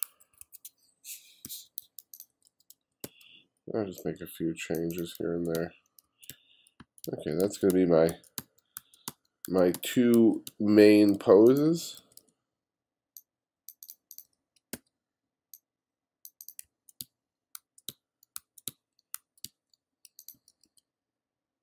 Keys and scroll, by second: 0.3-2.8 typing, 5.0-11.7 typing, 14.3 b, 16.7-20.4 typing.